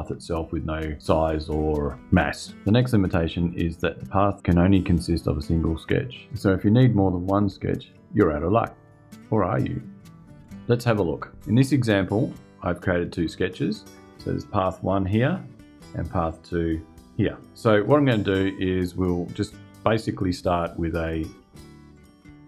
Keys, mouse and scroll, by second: 12.4 click, 15.5 click, 21.6 click.